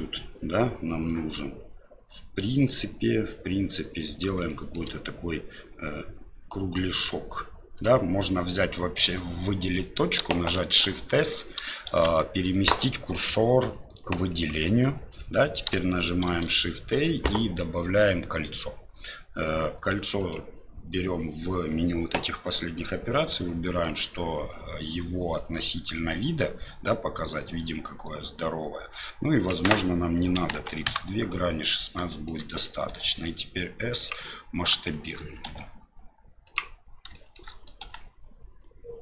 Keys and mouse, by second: 4.5 shift+middle click, 7.7 right click, 10.5 shift+s, 11.9 shift+s, 16.3 shift+a, 20.3 click, 22.8-23.8 drag, 29.4-31.3 drag, 32.1 shift+click, 32.9 s, 34.9 middle click, 35.5 s, 37.3 middle click.